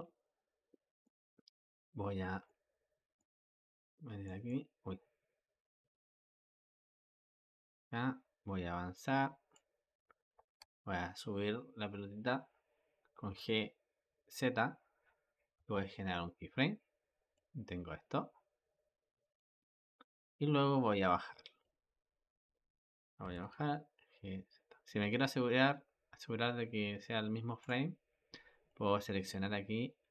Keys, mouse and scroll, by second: 7.5-10.4 drag, 10.4 g, 17.2-20.2 drag, 28.5-30.1 drag.